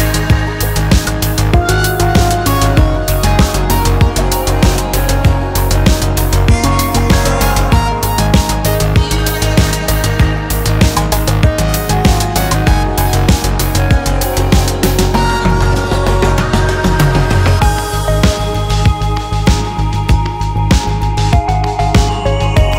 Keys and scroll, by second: 8.2 space, 10.5 super+z, 17.4 super+z, 17.7 space, 20.3 super+z.